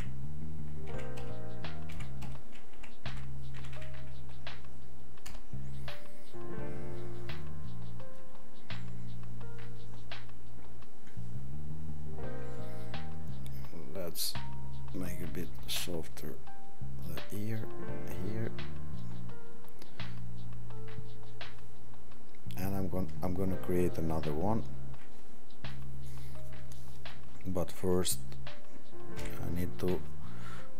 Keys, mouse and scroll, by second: 29.2 ctrl+0.